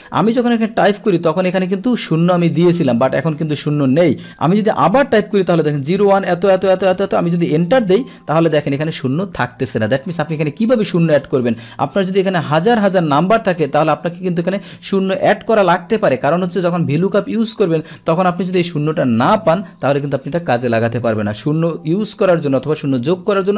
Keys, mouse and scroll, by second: 1.5 click, 1.7 click, 3.1 click, 4.2 Delete, 4.2 Up, 4.5 Delete, 5.0 Down, 7.7 Return.